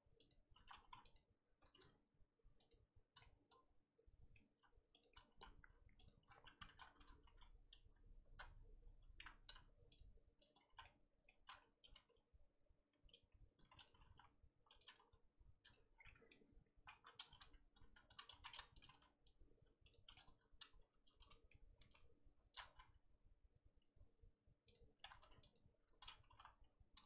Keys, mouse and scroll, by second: 0.3 alt+click, 0.7 2, 1.1 alt+click, 3.2-5.0 middle drag, 5.0 alt+shift+click, 5.2 scroll up 1, 5.3 z, 6.0 alt+shift+click, 6.4 z, 7.2 ctrl+z, 9.9 alt+shift+click, 10.4 alt+shift+click, 10.7 z, 10.8 middle click, 11.3 z, 11.9 s, 15.8 Tab, 15.9 scroll down 3, 16.0 middle click, 16.4-16.8 scroll up 1, 16.9 Tab, 17.3 f, 18.3 ctrl+z, 18.8 g, 20.1-21.7 middle drag, 21.7 g, 25.5 alt+Left, 26.3 g.